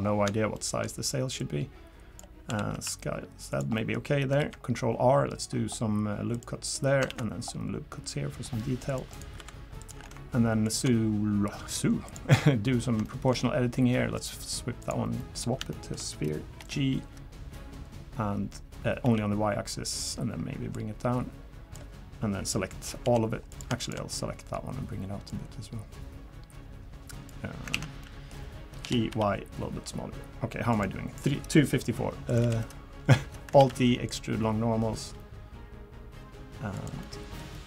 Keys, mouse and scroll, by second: 0.0-0.5 scroll down 4, 0.5 shift+middle click, 1.4 click, 2.5 s, 3.7 middle click, 4.4 ctrl+r, 7.1 ctrl+r, 9.4 3, 9.8 click, 10.6 ctrl+shift+click, 12.1 click, 13.0 shift+middle click, 13.3 shift+scroll down 1, 13.4 scroll up 1, 14.1 click, 15.2 middle click, 15.7 shift+middle click, 16.6 g, 20.7 click, 23.0 l, 23.5 click, 23.8 shift+click, 24.1 middle click, 25.3 click, 27.7 ctrl+z, 28.0 middle click, 28.8 g, 32.3 click, 32.4 l, 33.6 alt+e, 37.0 middle click, 37.5 middle click.